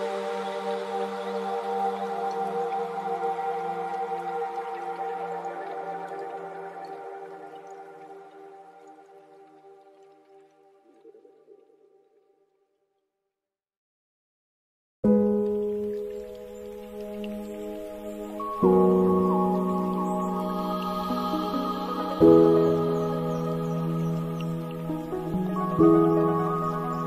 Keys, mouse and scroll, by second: 2.2-3.2 middle drag, 3.2-4.1 scroll up 6, 4.1-7.5 drag, 9.6-12.9 drag, 12.9 scroll down 3, 13.9-14.6 scroll up 3, 14.6-16.5 drag, 16.5 scroll down 2, 18.3-21.9 drag, 21.9-22.7 scroll down 2, 22.7-24.0 drag, 24.0-25.6 scroll down 4, 25.6-27.0 drag.